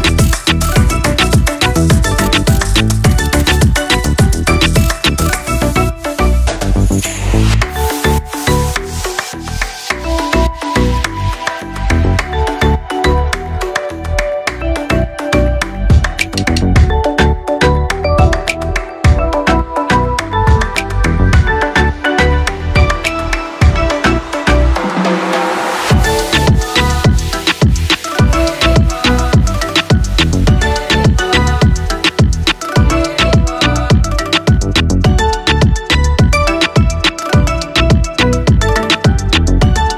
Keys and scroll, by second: 12.9 ctrl+=.